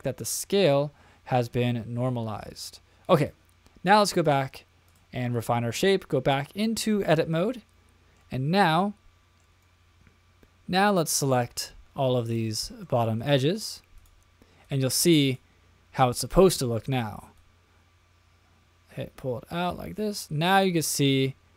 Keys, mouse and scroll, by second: 3.2 click, 4.1-5.0 drag, 7.5-8.2 middle drag, 8.8-9.5 shift+middle drag, 12.2 click, 13.2 shift+click, 13.9 shift+click, 14.6 shift+click, 15.2 shift+click, 16.2 shift+click, 17.3-20.6 drag, 21.0-21.5 middle drag.